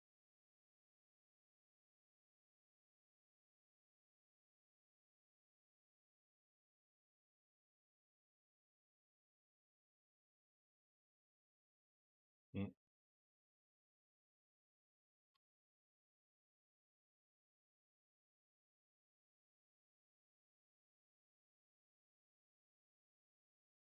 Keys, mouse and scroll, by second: 4.5 space, 10.0 Escape, 10.7-15.2 drag, 15.2 g, 19.7-20.7 drag, 20.7 g.